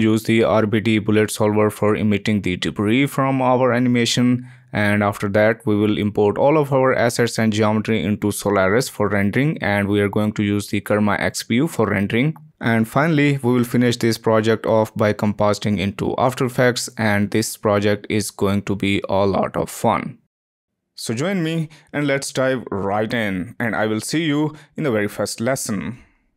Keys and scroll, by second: 2.5 p, 6.9 Return.